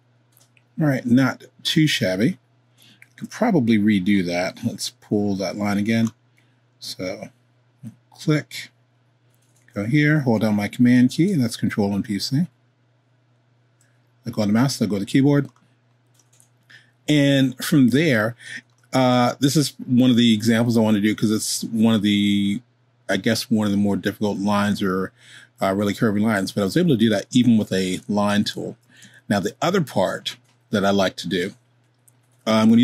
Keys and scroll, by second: 3.0 super+z, 28.0 super+z, 28.5 super+z, 29.2 super+z.